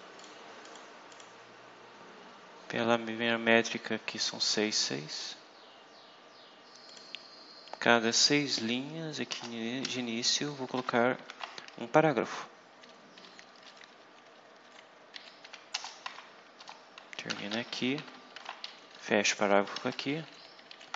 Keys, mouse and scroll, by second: 0.1 click, 0.6 click, 1.0 click, 5.0 click, 6.0 scroll down 2, 6.8 click, 7.2 scroll down 2, 8.4 click, 9.2 Return, 9.7 shift+', 10.7 p, 11.2 shift+., 11.9 Down, 13.6 Down, 15.1 Up, 15.4 End, 15.6 Return, 16.5-18.7 typing, 19.4 shift+Up, 19.7 shift+Right, 20.0 shift+Up.